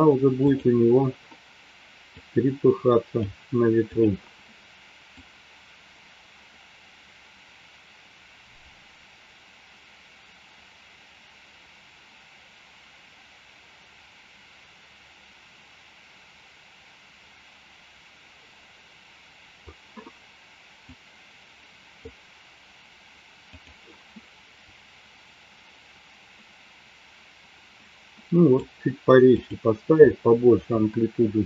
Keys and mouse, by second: 0.7 click, 2.8 drag, 3.8 click, 5.4-20.0 drag, 20.9-22.6 drag, 24.8-29.1 drag, 29.2 click, 30.6 Delete.